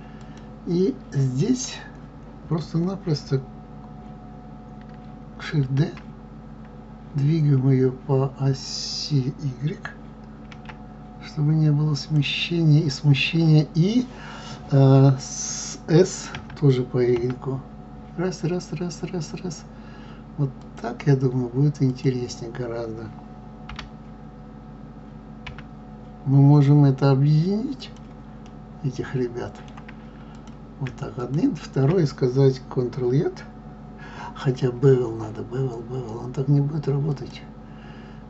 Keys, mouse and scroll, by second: 0.1 click, 5.6 shift+d, 21.9 click, 23.7 g, 28.4-30.2 middle drag, 30.2 click, 31.1 shift+click, 37.2 click.